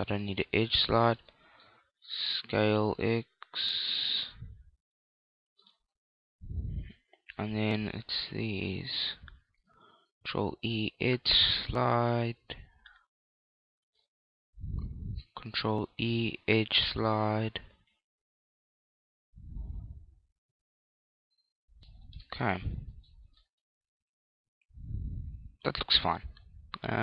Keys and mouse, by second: 0.8 right click, 2.1 s, 5.6 click, 5.9-8.6 middle drag, 8.6 right click, 10.3 ctrl+e, 13.8 click, 14.8 right click, 15.8 ctrl+e, 21.7 click, 22.2-25.6 middle drag, 23.4 Tab, 26.5-27.0 middle drag.